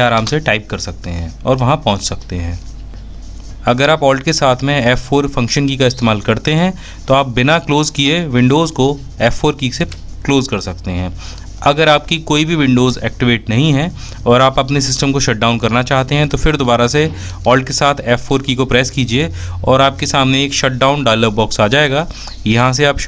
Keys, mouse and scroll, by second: 4.3 alt+F4, 14.8 a, 15.7 alt+f.